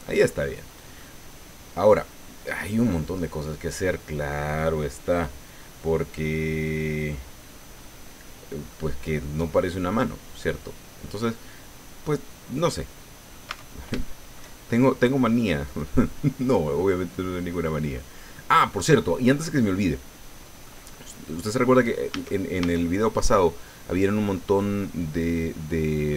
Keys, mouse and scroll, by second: 0.6 scroll up 2, 1.0-4.0 drag, 7.8-8.9 drag, 9.1 click, 9.8 middle click, 10.4-11.5 drag, 12.8 click, 13.5 Tab, 14.0 shift+click, 15.6 click, 16.2-16.5 scroll up 1, 16.8 middle click, 18.3 middle click, 19.2 scroll down 1, 19.6-20.8 middle drag, 20.9-21.2 scroll up 2, 21.6-22.0 scroll down 2, 22.1 a.